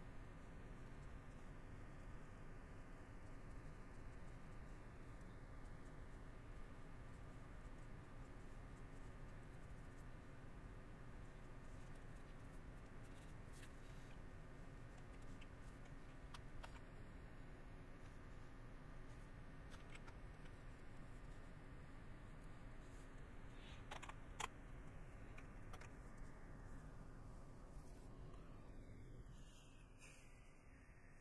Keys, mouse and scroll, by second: 0.4 middle click, 1.4 middle click, 2.0 middle click, 2.9 middle click, 3.6 middle click, 4.7 middle click, 6.1 middle click, 6.8 middle click, 7.3 middle click, 8.5 middle click, 9.0 middle click, 10.2 middle click, 11.7 middle click, 13.1 middle click, 16.7 middle click, 19.3 middle click, 27.1 middle click, 27.7 middle click, 28.3 shift+middle click.